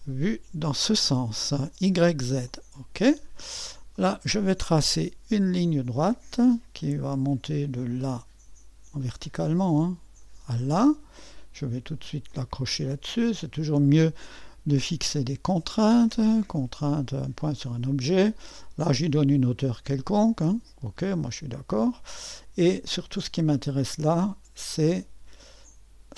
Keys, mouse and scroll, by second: 5.4 click, 7.9-10.9 drag, 12.3-14.2 drag, 17.4-20.5 drag, 21.7-26.1 drag.